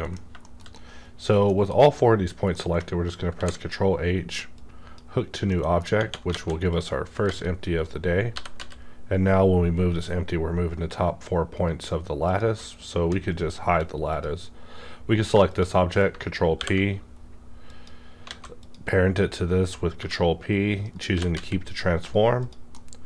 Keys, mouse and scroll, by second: 0.1 scroll down 1, 0.4 shift+middle click, 0.8-2.5 shift+middle drag, 2.5 middle click, 3.3 ctrl+h, 4.5-5.9 drag, 5.4 middle click, 6.3 alt+a, 6.7 click, 7.3 g, 7.8 right click, 8.3 g, 8.6 z, 12.2 click, 12.3 right click, 13.0 h, 14.1 click, 15.4 shift+click, 16.5 ctrl+p, 18.2 alt+a, 18.5 click, 20.0 g, 20.8 right click, 21.1 g, 21.3 z, 22.0 right click, 22.3 click, 22.4 click, 22.7 middle click.